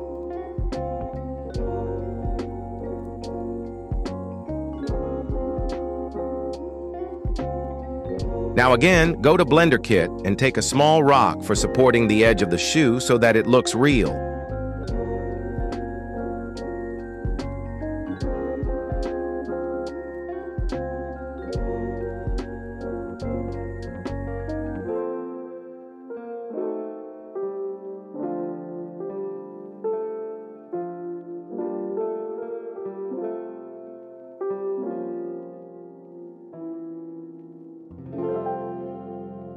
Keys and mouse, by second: 13.7 KP_1, 14.9 n, 16.2 click, 17.6 g, 19.2 r, 21.8 g, 23.1-23.6 middle drag, 24.1-24.5 middle drag, 24.7 g, 26.4 KP_1, 27.7 KP_1, 28.8 s, 29.5 s, 29.5 s, 29.8 g, 32.5 middle click, 33.7 shift+middle drag, 34.6 shift+middle click, 35.7 g, 37.5 g.